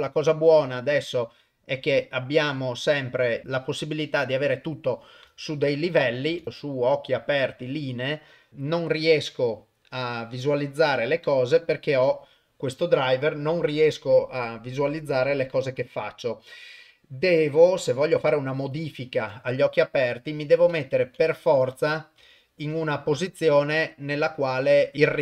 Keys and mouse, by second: 1.9 middle click, 2.7 middle click, 5.4-6.2 ctrl+middle drag, 6.8 click, 8.5 shift+Left, 20.0 click, 20.7 Right, 21.1 Right, 21.7 Left, 22.2 Left, 22.6 Right.